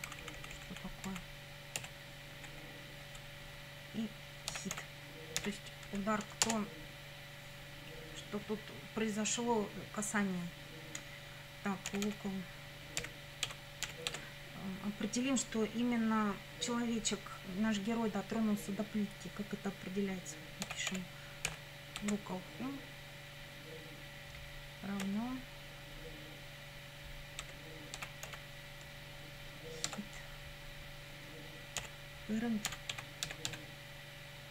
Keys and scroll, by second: 0.1 Left, 1.8 BackSpace, 2.4 Right, 4.5 h, 4.8 i, 5.4 t, 5.9 Right, 6.5 Return, 11.7-14.1 typing, 20.4-22.0 typing, 25.1 =, 27.4 space, 28.0 h, 28.3 i, 29.9 Tab, 31.8-34.5 typing.